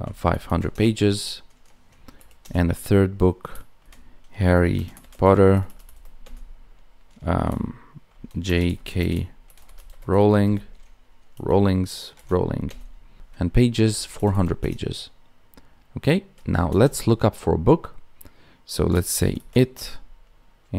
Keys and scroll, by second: 4.7 space, 8.4 space, 8.9 space.